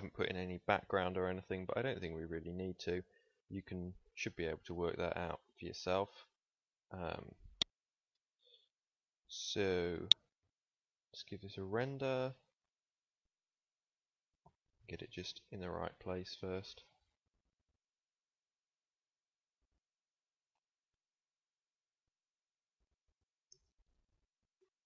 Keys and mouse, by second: 1.6-4.0 middle drag, 13.5 KP_0, 14.2 shift+f, 16.7 drag, 20.1 shift+f, 23.6 ctrl+s.